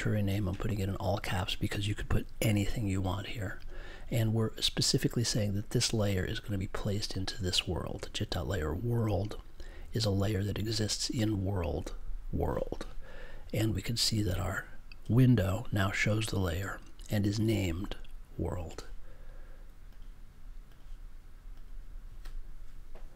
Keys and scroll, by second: 2.4 super+j.